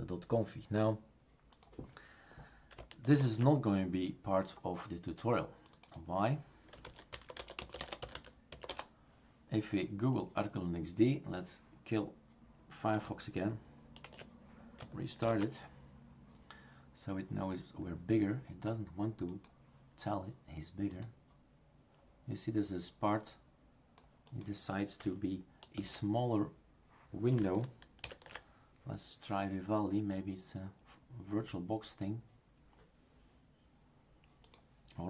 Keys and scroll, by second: 3.1 ctrl+alt+f, 6.9-9.0 typing, 14.0 shift+super+q, 15.2 ctrl+alt+f, 25.8 shift+super+q, 28.0 ctrl+alt+v.